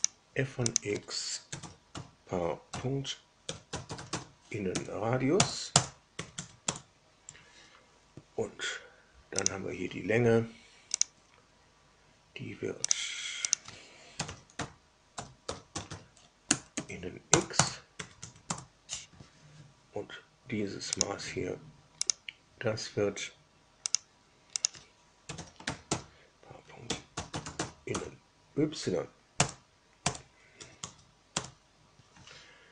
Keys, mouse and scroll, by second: 0.6 click, 1.2-4.5 typing, 4.7 Down, 5.3 Return, 5.7 Return, 6.1 Tab, 6.3 Tab, 6.6 Return, 9.3 click, 10.9 click, 12.8 click, 13.4 click, 13.9-16.4 typing, 16.4 Down, 16.7 Down, 17.3 Return, 17.5 Return, 17.9 Tab, 18.1 Tab, 18.4 Return, 20.9 click, 21.9 click, 23.9 click, 24.5 click, 24.9-28.4 typing, 29.3 Return, 30.5 Tab, 30.8 Tab, 31.3 Return.